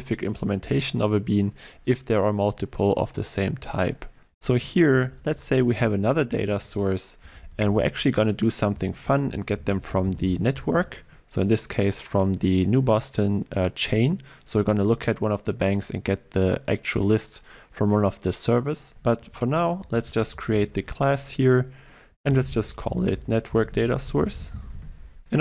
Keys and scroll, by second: 4.7 alt+1, 4.9 Up, 6.6 alt+Insert, 19.3 alt+Insert.